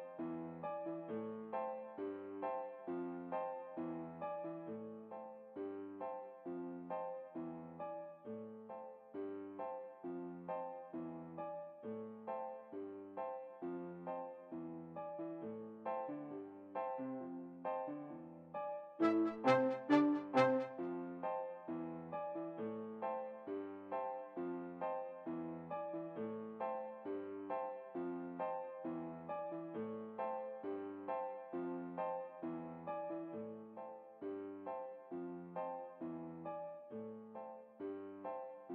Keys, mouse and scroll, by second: 4.0-5.4 right drag, 5.0 s, 5.5 right click, 8.1-9.5 right drag, 8.8 s, 11.1-12.6 right drag, 11.6 s, 15.1-16.4 right drag, 15.6 s, 17.4 a, 19.4-20.9 right drag, 20.8 alt+a, 31.2 Escape, 32.3-33.8 right drag, 34.7 s, 36.6-38.7 right drag, 37.5 s.